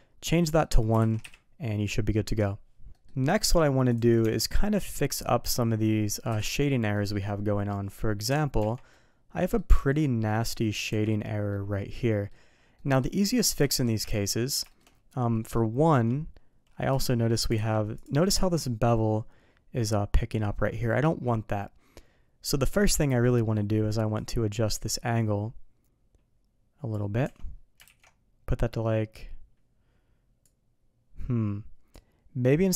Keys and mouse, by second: 0.4 middle click, 0.9 alt+a, 1.1 KP_3, 2.9 middle click, 3.3 shift+middle drag, 4.2 Tab, 4.9 click, 6.3 KP_Decimal, 6.9 middle drag, 8.6 Tab, 8.9-9.6 middle drag, 9.8 Tab, 10.5 middle drag, 11.2 middle drag, 11.9-12.3 middle drag, 12.8 middle drag, 13.7 shift+middle drag, 14.0 Tab, 14.4 middle click, 14.7 shift+middle click, 15.3 middle click, 16.9 shift+middle drag, 18.5 middle click, 24.2-26.9 drag, 28.2 alt+v, 30.4-31.9 drag.